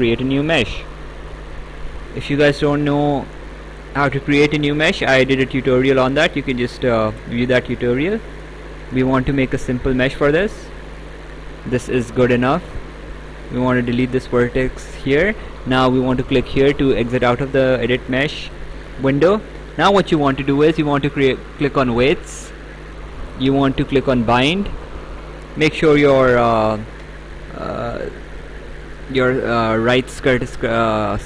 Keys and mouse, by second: 0.8 click, 3.4 click, 6.7 click, 12.1 click, 13.4 click, 17.4 click, 22.0 click, 24.8 click.